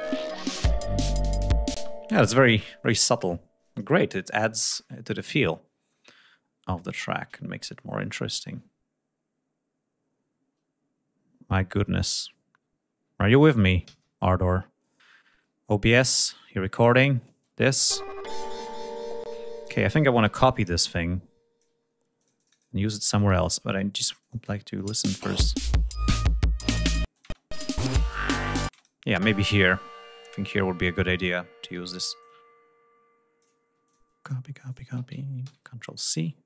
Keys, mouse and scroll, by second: 13.5 ctrl+s, 14.6 ctrl+scroll up 2, 16.4 click, 17.3 space, 18.5 ctrl+scroll down 1, 18.9 ctrl+space, 19.9 r, 20.6 click, 21.6 ctrl+scroll up 1, 21.9 ctrl+click, 22.6 ctrl+click, 23.1 ctrl+scroll down 1, 23.9 click, 24.1 space, 25.3 ctrl+scroll up 1, 26.7 space, 26.8 click, 28.4 space, 29.3 ctrl+scroll down 1, 30.1-30.9 ctrl+scroll up 2, 31.4 r, 31.9-33.3 drag, 33.5 ctrl+click, 33.9 ctrl+click, 34.4 ctrl+click, 35.1 ctrl+c, 35.4 ctrl+scroll down 1.